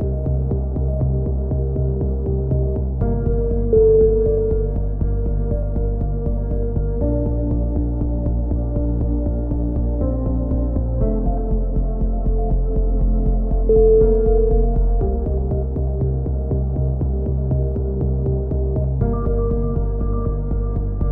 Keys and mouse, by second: 0.5-1.6 middle drag, 1.6-2.8 drag, 2.8-3.9 middle drag, 4.0 click, 6.1-7.1 right drag, 6.5 click, 8.4-9.4 middle drag, 9.4 click, 11.2-13.4 drag, 12.5 right click, 14.0 click, 15.3-16.3 right drag, 16.5-18.5 middle drag.